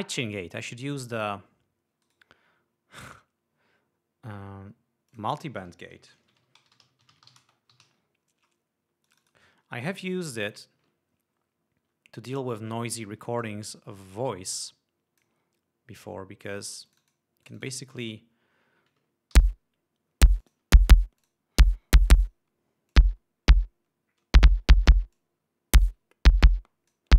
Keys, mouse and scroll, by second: 0.2 right click, 1.1 click, 2.6 right click, 5.6 click, 6.5-8.9 typing, 9.6 click, 11.0 click, 13.6 click, 14.7-15.9 drag, 17.4-18.6 drag, 19.9 l, 20.9 click, 21.7 click, 22.8 click, 23.5 click, 25.7-27.1 drag.